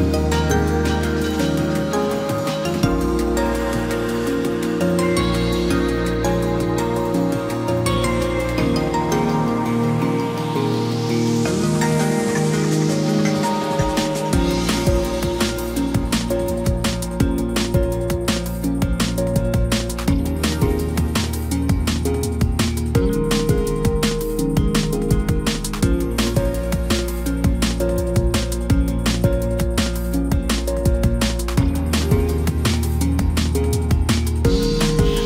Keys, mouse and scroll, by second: 18.5 ctrl+j, 21.5 ctrl+t.